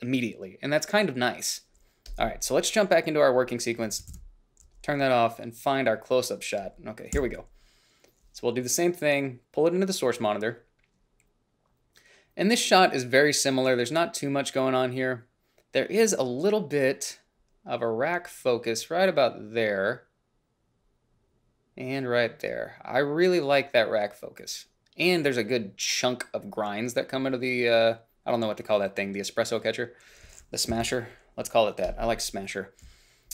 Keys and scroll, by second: 4.4 ctrl+b, 7.5 f, 31.0 i.